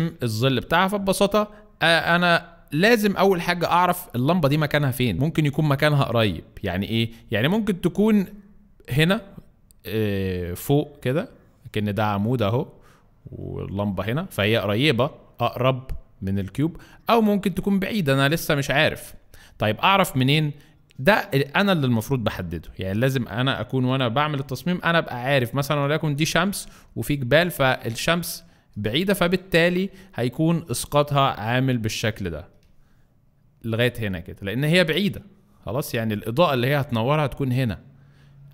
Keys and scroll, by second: 3.3 space.